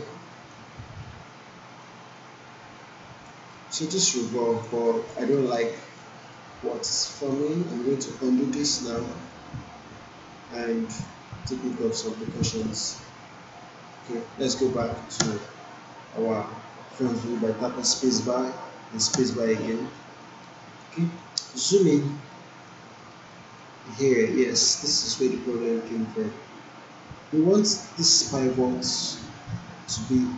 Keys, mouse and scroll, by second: 2.1-3.3 alt+drag, 3.5 alt+right click, 3.9-5.1 alt+click, 5.3 alt+right click, 5.7 alt+middle click, 6.3-6.9 alt+click, 7.1 alt+right click, 7.5 alt+middle click, 8.0 alt+right click, 9.1 ctrl+z, 10.4-11.1 alt+drag, 15.1 space, 19.1 space, 19.9 alt+middle click, 20.4-21.0 alt+right click, 21.1 alt+middle click, 21.5 alt+right click, 21.9 alt+middle click, 22.3-22.9 alt+right click, 23.1 alt+middle click, 23.5-24.1 alt+right drag.